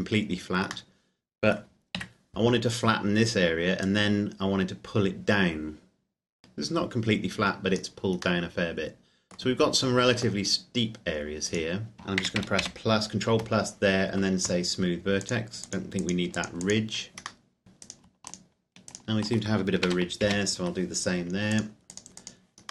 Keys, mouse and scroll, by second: 1.0 middle click, 2.0 z, 3.9 click, 8.4 middle click, 11.5 right click, 12.2 ctrl+KP_Add, 15.3 click, 17.4 middle click, 18.1 right click, 18.5 shift+right click, 18.6 shift+right click, 20.0 ctrl+KP_Add, 21.8 click.